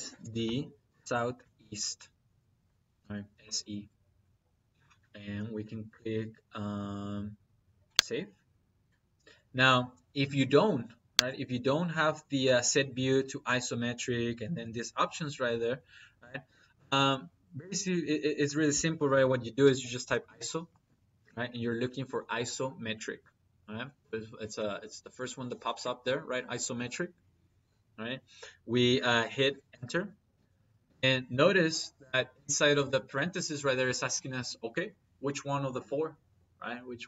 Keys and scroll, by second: 0.7 s, 1.5 e, 15.9 Escape, 16.5 Escape, 17.7 Escape, 19.5 i, 19.9 o, 29.5 Return.